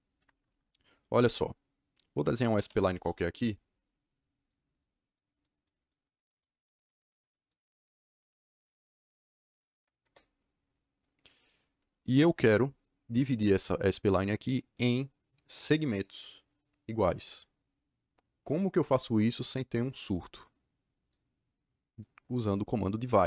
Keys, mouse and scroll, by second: 0.1 Escape, 0.3 Escape, 0.4 Escape, 2.3-3.2 typing, 4.3 click, 4.7 click, 5.0 click, 5.2 click, 5.5 click, 5.7 click, 6.0 click, 6.2 click, 6.5 click, 6.7 click, 6.9 click, 7.2 click, 7.6 click, 8.1 click, 10.0 KP_Enter.